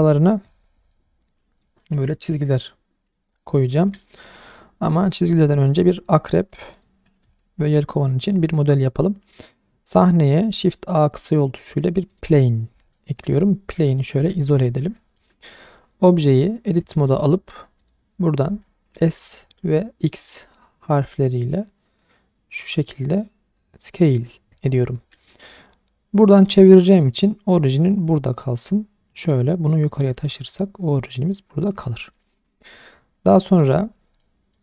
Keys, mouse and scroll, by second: 0.8 click, 1.2-3.9 scroll down 1, 4.0 shift+middle drag, 5.7 click, 6.0-6.8 scroll down 2, 6.8 click, 7.2 shift+a, 12.9-13.3 middle drag, 13.8 /, 14.5-14.8 scroll down 2, 14.8-15.2 middle drag, 17.1 click, 19.0 s, 19.4 x, 24.1 click, 24.7-25.2 scroll up 2, 28.6 click, 32.1-32.6 scroll up 2, 32.2 shift+middle click, 32.6-33.2 scroll down 2, 33.5 shift+middle click, 33.5 scroll down 2, 33.8-34.2 scroll up 2, 34.2 middle click.